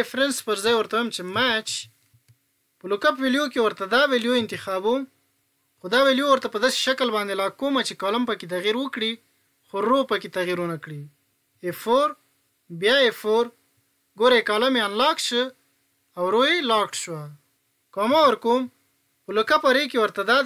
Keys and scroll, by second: 11.6 F4.